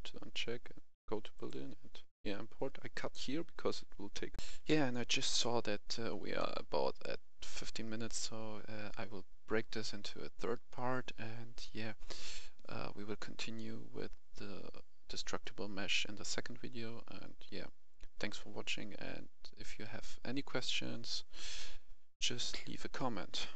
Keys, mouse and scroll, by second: 4.3 F10.